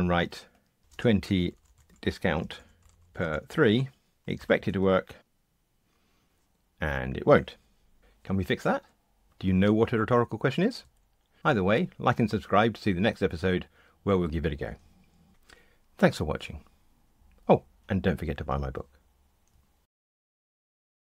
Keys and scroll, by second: 4.4 ctrl+r.